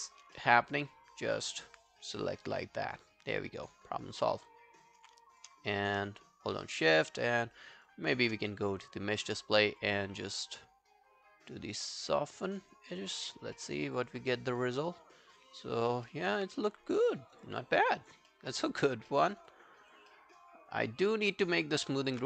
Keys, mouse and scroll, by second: 0.4 alt+middle click, 0.7 alt+scroll down 1, 0.9 alt+click, 1.5 alt+right click, 3.1 alt+click, 5.4 shift+click, 6.2 shift+right click, 10.2 double click, 13.6 alt+middle click, 13.8 alt+right click, 14.0 alt+click, 14.3 right click, 16.1 alt+middle click, 16.3 alt+right click, 17.0 alt+middle click, 17.2 alt+right click, 17.4 alt+click, 17.8 alt+middle click, 18.0 alt+right click, 18.3 alt+middle click, 18.5 alt+right click, 18.8 alt+click, 19.1 alt+middle click, 19.3 alt+right click, 19.5 alt+click, 20.1 alt+middle click, 20.4 alt+click, 21.0 alt+scroll down 1, 21.2 alt+click, 21.6 alt+middle click, 21.8 alt+right click, 22.0 alt+click, 22.2 q.